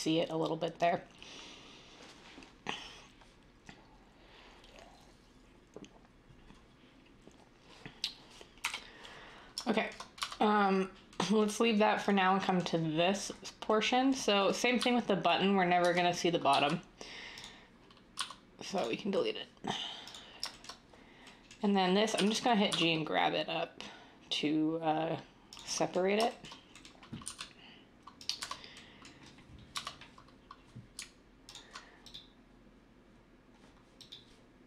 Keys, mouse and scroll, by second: 8.6 \, 10.2 Tab, 14.7 z, 15.8 Tab, 16.5 typing, 18.1 x, 22.1-22.7 typing, 27.2 s, 28.4 Tab, 29.7 Tab.